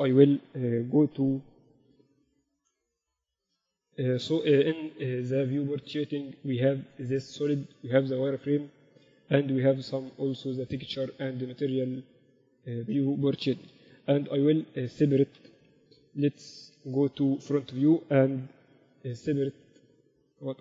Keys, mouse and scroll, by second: 2.7 KP_2, 2.8 KP_2, 4.0 z, 5.2-7.4 drag, 7.7-9.5 drag, 10.0-12.0 drag, 14.4-14.7 KP_2, 14.9 z, 16.2 KP_1, 16.2 KP_4, 17.1 KP_1, 18.9 KP_2, 19.0 KP_2, 19.2 z, 20.1 z.